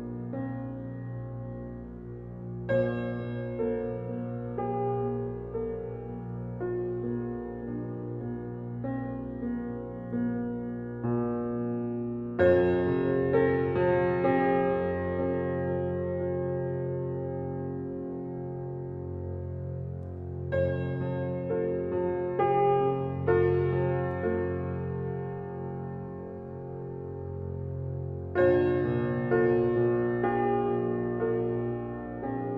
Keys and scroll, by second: 11.0 ctrl+g.